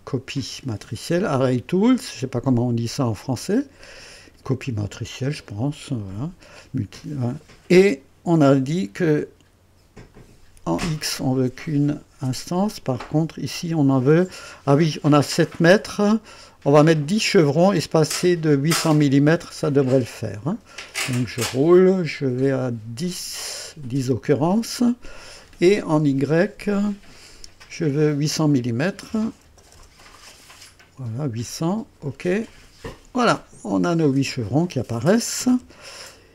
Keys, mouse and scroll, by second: 1.1 click, 10.1 click, 12.6 click, 20.7-22.5 scroll up 6, 27.2 click, 29.1 KP_8, 29.4 KP_0, 32.4 click, 34.0-34.7 drag, 34.5-36.3 typing, 36.1 scroll up 1.